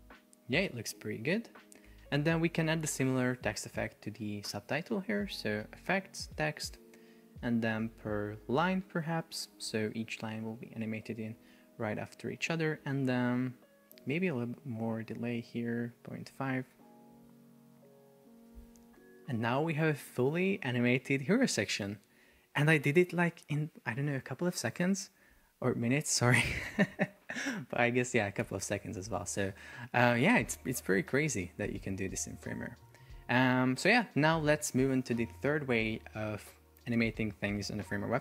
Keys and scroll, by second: 2.0 Escape, 14.8 Up, 16.4 Return, 16.8 super+p, 21.5 super+r, 31.3 super+r.